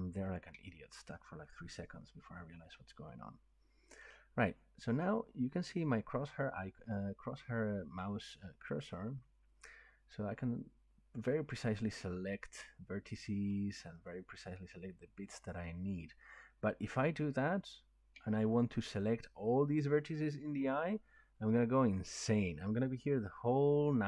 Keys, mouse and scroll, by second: 3.9 middle click, 12.6 click, 14.1 click, 15.5 click, 18.6 shift+click, 19.2 middle click, 19.3 middle click, 19.3 middle click, 20.3 scroll.